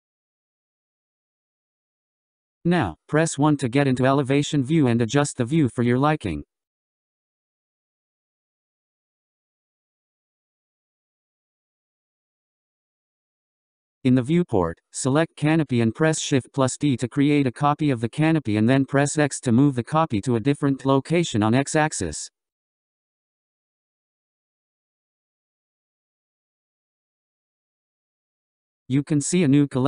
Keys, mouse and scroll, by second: 3.0 KP_1, 6.0-9.0 middle drag, 9.0-10.6 scroll up 2, 10.8-13.8 middle drag, 15.1 click, 21.1 shift+d.